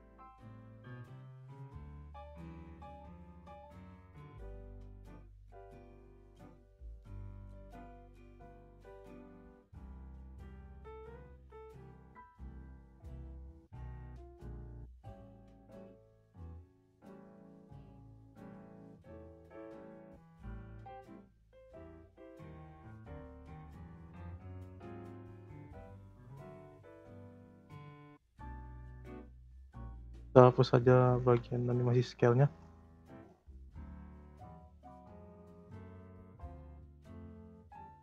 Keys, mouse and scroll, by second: 7.1 click, 8.3-9.5 drag, 10.1 click, 10.9-11.2 scroll down 2, 11.2 g, 12.5 click, 13.7-14.2 drag, 14.2 space, 14.8 space, 15.3-17.4 drag, 17.4 space, 18.4 space, 19.3-22.3 drag, 23.9 click, 25.2 Delete, 26.2-28.5 drag, 28.5-29.1 scroll up 2, 29.1-30.7 drag, 31.2 Delete, 31.5-32.0 scroll up 3, 32.0 shift+middle click, 32.5-33.0 scroll up 4, 33.0-34.1 shift+middle drag, 34.1-37.1 drag.